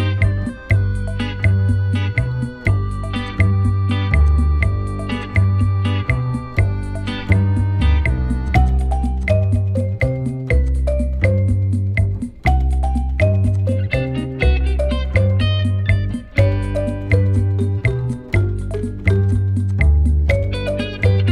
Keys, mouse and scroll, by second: 0.5-0.9 scroll down 1, 1.7-2.7 alt+scroll up 1, 2.7 right click, 6.2 ctrl+z, 7.7 typing, 7.8 Return, 8.6 double click, 11.3 Delete, 18.2 alt+scroll down 1, 19.2 ctrl+click.